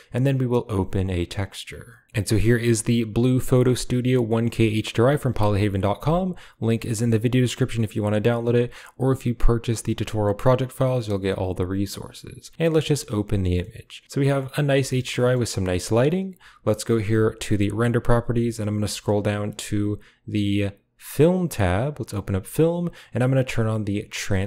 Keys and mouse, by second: 12.6 click, 13.5-14.6 middle drag, 14.8 shift+middle click, 15.1 middle click, 17.3 click, 17.9 click, 21.1 click, 21.8 click, 22.0 click.